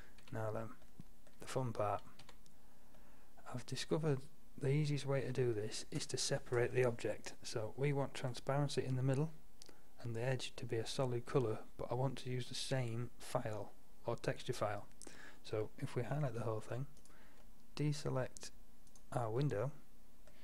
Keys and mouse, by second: 0.3 a, 2.3 a, 4.3-4.8 middle drag, 7.7-11.2 middle drag, 11.6-13.4 middle drag, 17.0-17.5 right drag, 17.5-20.4 middle drag.